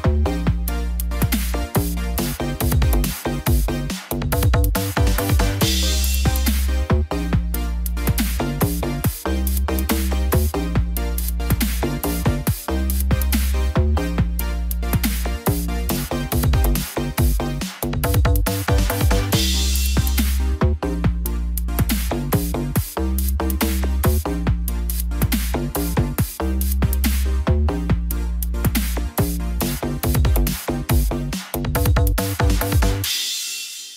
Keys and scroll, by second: 20.8 ctrl+=, 32.8 ctrl+z.